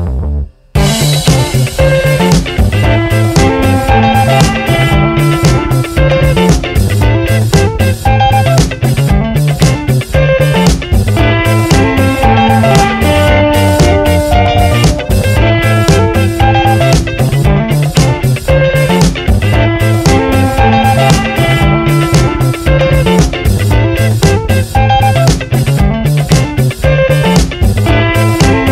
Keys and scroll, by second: 2.7 t, 5.4 BackSpace, 6.1 Left, 6.8 alt+Right, 8.7 alt+Right, 11.0 ctrl+Return, 12.0 v, 12.2 Right.